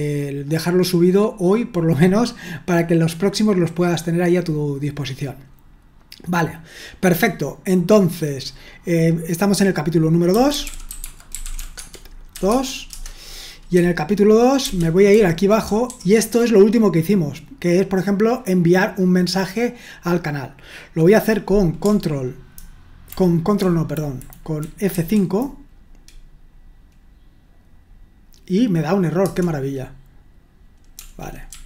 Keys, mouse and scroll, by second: 10.4-13.4 typing, 14.6-15.9 typing, 22.6 ctrl+Delete, 23.6 Delete, 24.9 F5, 30.9-31.6 typing.